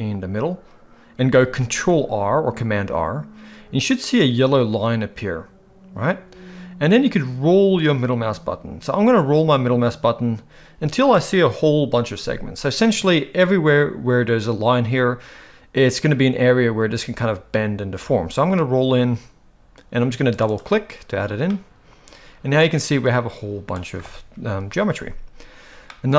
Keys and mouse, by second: 1.7 ctrl+r, 21.5-23.7 middle drag, 24.4 KP_1, 25.8 middle click.